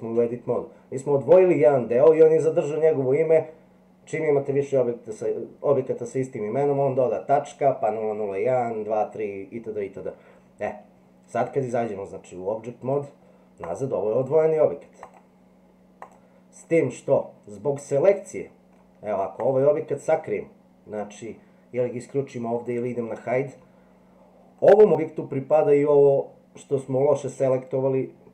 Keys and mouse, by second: 11.6-12.9 drag, 14.2 click, 15.0 click, 16.0 click, 16.6-18.7 middle drag, 19.4 click, 22.5 click.